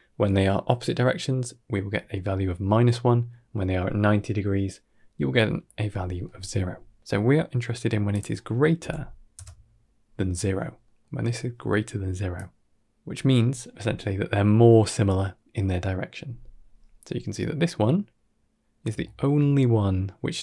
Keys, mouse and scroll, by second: 7.5 middle click, 8.0-9.2 drag, 10.7 middle click, 12.3 click, 18.9 shift+middle click.